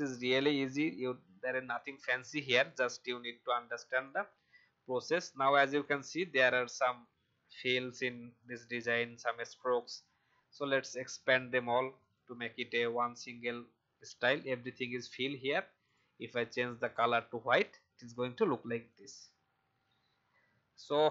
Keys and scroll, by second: 0.3 ctrl+shift+v.